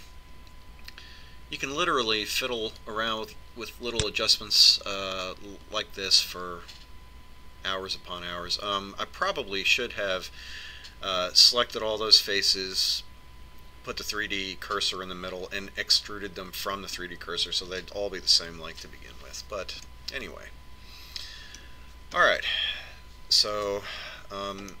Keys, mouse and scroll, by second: 3.9 click, 21.0-22.9 middle drag, 23.3-24.8 middle drag.